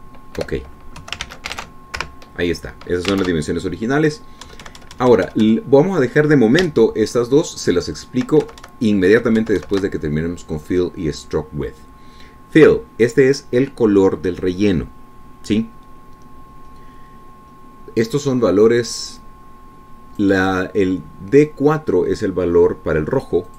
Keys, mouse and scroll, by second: 0.2 F5, 1.0 alt+Tab, 1.8 BackSpace, 2.4 KP_2, 2.7 ctrl+s, 3.0 ctrl+alt+Tab, 3.4 ctrl+alt+F5, 4.6 alt+Tab, 5.9 Right, 8.0 shift+Right, 10.8 shift+Right, 20.6-21.8 drag.